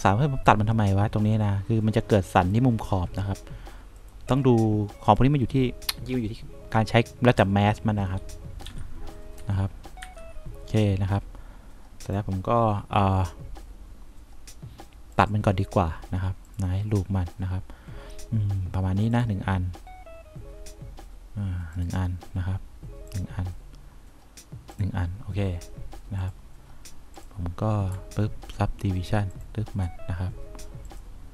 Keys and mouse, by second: 9.0 F2, 9.7 F3, 10.4 F4, 23.4 click, 25.0 click.